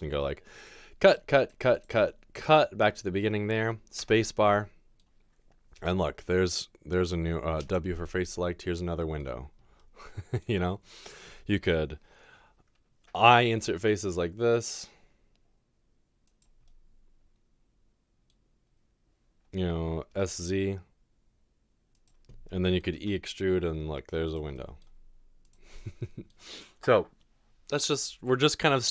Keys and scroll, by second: 5.8 typing, 7.6 typing, 13.4 i, 20.3 typing, 22.7-23.4 typing.